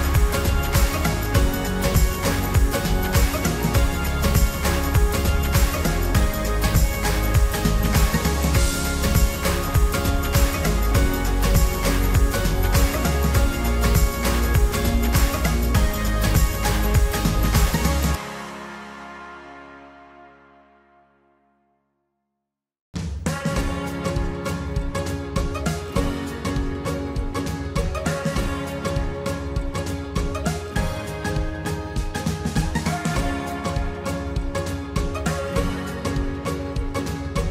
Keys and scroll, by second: 20.2 Delete, 28.4 ctrl+t.